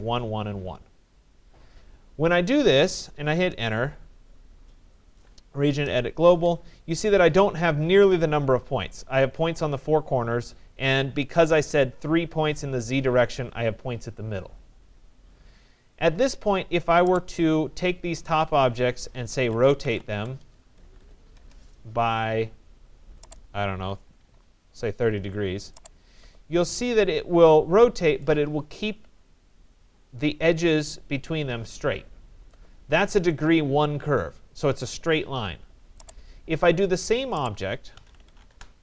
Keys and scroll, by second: 2.9 Return, 20.4 BackSpace, 21.4 Return, 24.3 0, 24.7 Return, 38.1 Return.